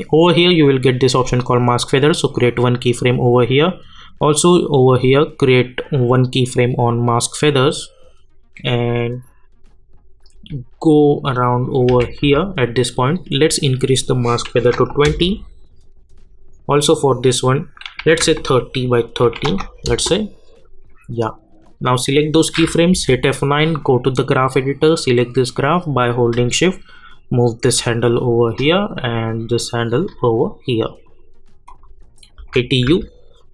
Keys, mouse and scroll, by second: 2.3 click, 7.0 click, 7.7 scroll down 1, 9.5-10.1 scroll up 1, 10.1-10.9 scroll down 1, 10.9 click, 11.9 k, 12.2 j, 14.0 click, 15.0 Return, 17.3 click, 19.8 Return, 21.6-22.9 drag, 22.9 F9, 23.8-28.5 drag, 28.5-31.2 drag, 32.4 u, 32.8 u.